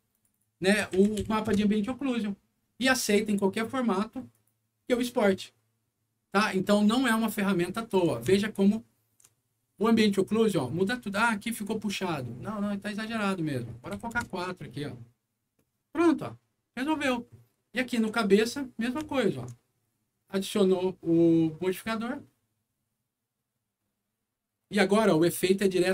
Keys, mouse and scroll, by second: 0.0 click, 0.2 click, 1.2 5, 1.4 Return, 4.2 click, 8.3 alt+middle click, 11.2 alt+scroll up 2, 12.9 click, 13.9 4, 14.3 Return, 16.0 scroll down 1, 17.2 middle click, 17.7 click, 19.0 alt+middle click, 21.6 alt+click.